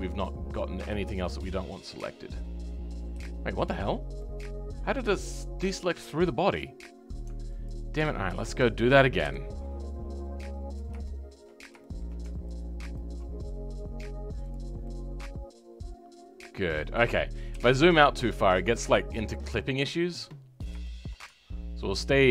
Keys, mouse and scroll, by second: 1.6 scroll up 2, 1.9-3.0 middle drag, 3.0-3.4 scroll up 2, 3.4 shift+middle click, 3.8-4.1 scroll up 2, 4.1-7.6 middle drag, 7.6 alt+click, 9.2 KP_7, 9.5-10.6 scroll down 3, 10.6 click, 11.0 shift+middle click, 11.5 scroll up 1, 11.8-12.9 shift+middle drag, 12.9 ctrl+click, 14.4 click, 14.8-17.5 middle drag, 17.5 KP_7, 18.7 click, 19.1-20.4 shift+middle drag, 20.4-20.8 scroll up 1, 20.8-22.3 shift+middle drag.